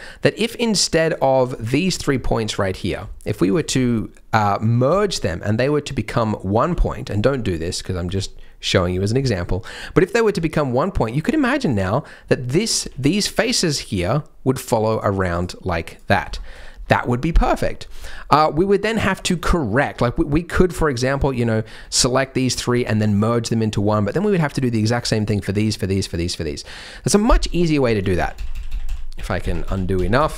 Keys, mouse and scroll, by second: 0.4 click, 1.1 click, 1.5 click, 1.8 click, 2.7 click, 2.7-3.0 scroll down 1, 3.2 shift+click, 3.4 shift+click, 3.7-4.8 scroll up 3, 4.9 s, 6.6 s, 8.0 s, 8.9-9.2 scroll down 3, 9.2 shift+middle click, 9.6-10.2 scroll up 1, 10.2-11.0 scroll down 2, 12.8 3, 13.3 click, 13.9 click, 14.5 click, 14.9 click, 15.3 click, 15.8 click, 16.1 scroll down 3, 16.3 shift+middle click, 17.5-17.9 scroll up 3, 18.1 shift+middle click, 18.3 shift+scroll down 2, 19.1 middle click, 19.9 Tab, 20.4 Tab, 21.0 1, 21.3 click, 21.7 b, 24.2 middle click, 24.8 click, 26.4 middle click, 26.4 click, 27.5 ctrl+z, 27.8-28.8 ctrl+z, 29.4 ctrl+z, 29.6 ctrl+z, 29.9 ctrl+z, 30.1 ctrl+z, 30.3 ctrl+z.